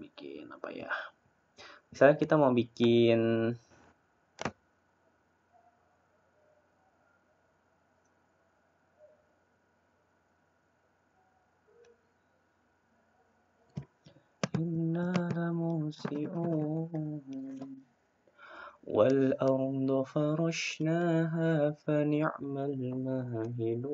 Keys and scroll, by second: 2.0 Delete.